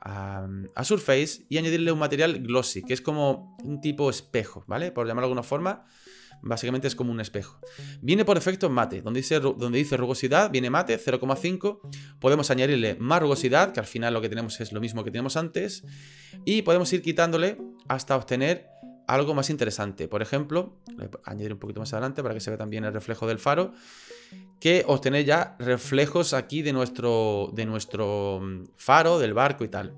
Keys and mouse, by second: 1.4-3.1 drag, 11.3-12.6 drag, 16.2 click, 16.6 click, 16.8 click, 16.9-20.4 drag, 21.3-22.8 drag.